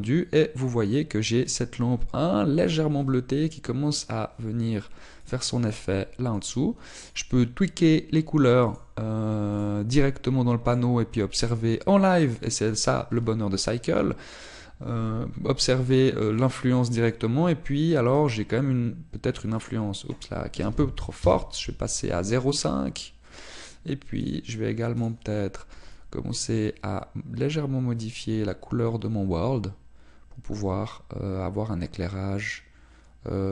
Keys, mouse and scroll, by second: 7.4 click, 19.4 click, 20.6 click, 27.0 click.